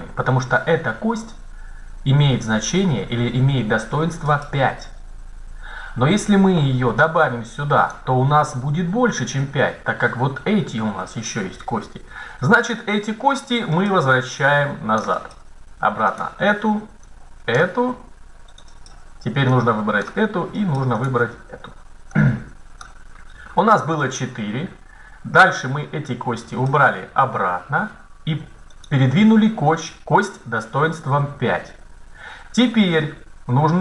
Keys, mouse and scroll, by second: 6.9-8.8 drag, 12.6 right click, 13.0 click, 17.8 click, 18.7 right click, 20.2 right click, 21.2-22.4 right drag, 22.9 click, 28.6-30.3 right drag.